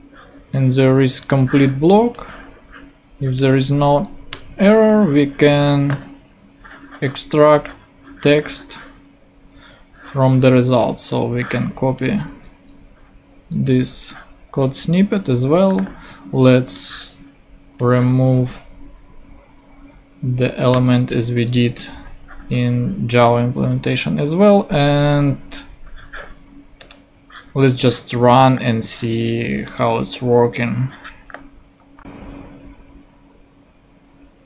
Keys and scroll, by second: 4.3 Return, 5.5 super+Tab, 12.2 super+Tab, 13.7 super+v, 20.7 BackSpace.